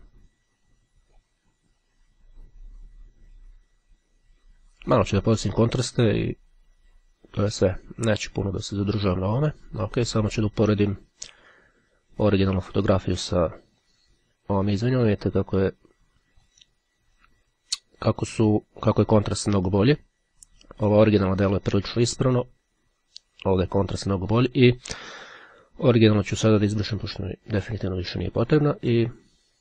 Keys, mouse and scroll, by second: 2.7-5.5 drag, 5.9-9.1 drag, 9.5 click, 11.0-13.7 drag, 14.0 click, 15.1 click, 16.6 click, 18.5-20.3 drag, 22.5 click, 24.5 click, 26.8-28.3 drag.